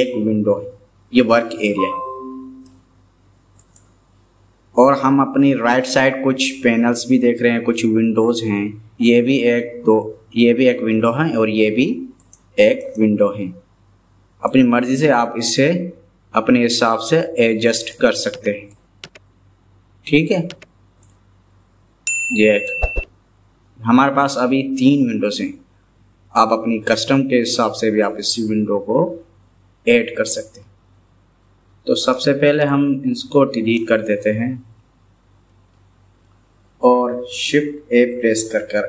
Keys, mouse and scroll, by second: 1.6-2.7 middle drag, 12.3 click, 12.9 click, 14.5-18.0 drag, 16.7-18.0 right drag, 18.7-20.2 drag, 18.7-20.2 right drag, 21.3-22.3 drag, 21.4-22.8 right drag, 30.4-32.1 middle drag, 32.7-33.8 drag, 35.4 Delete, 38.6 shift+a.